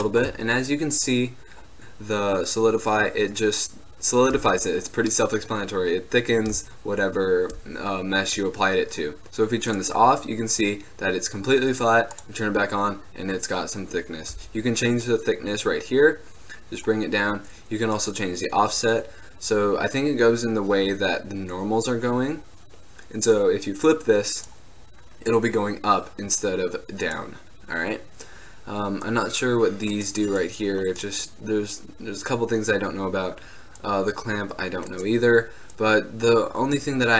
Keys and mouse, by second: 1.7-7.4 middle drag, 9.8 click, 12.2-14.1 drag, 15.7 click, 16.4 middle click, 17.0-20.9 drag, 23.4-25.4 drag, 26.5-28.3 drag, 29.2-35.8 drag, 35.9 click.